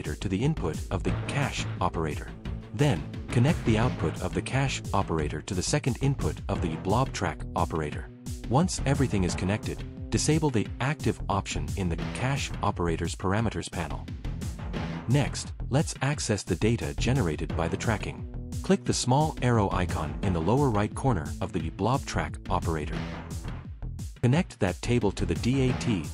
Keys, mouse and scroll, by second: 1.6 click, 3.2 click, 4.2 click, 5.1 click, 6.5 click, 6.7 click, 16.5 click, 17.9 click, 19.2 click, 19.8 click, 20.1 click, 20.7 click, 22.4 right click, 24.5 click.